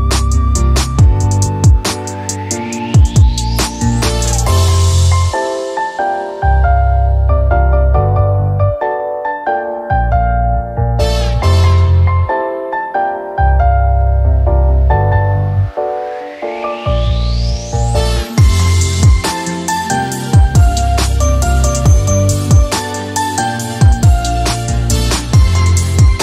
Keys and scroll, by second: 4.2 f, 6.5-7.7 typing, 25.4-26.2 typing.